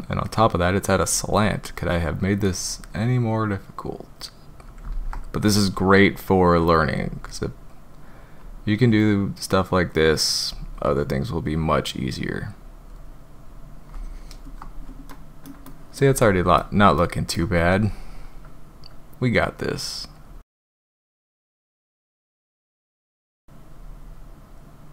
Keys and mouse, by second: 2.5-4.6 drag, 4.9 ctrl+z, 5.4-7.0 drag, 8.4-8.9 drag, 10.5-11.4 drag, 12.5 click, 15.0-15.4 drag, 15.6 shift+drag, 16.2 click, 17.1 shift+click, 20.2-20.9 drag, 21.2 click, 21.6 ctrl+z, 21.9 drag, 22.5-22.8 drag, 23.1 click, 23.7-24.5 drag.